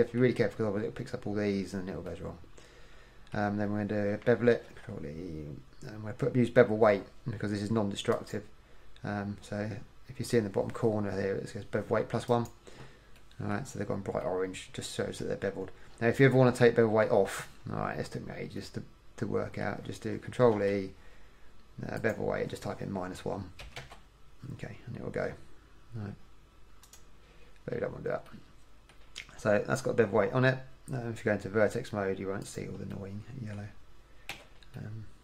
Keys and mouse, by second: 4.8 ctrl+e, 20.7 ctrl+e, 32.6-34.5 middle drag, 34.5 a, 34.9 middle click.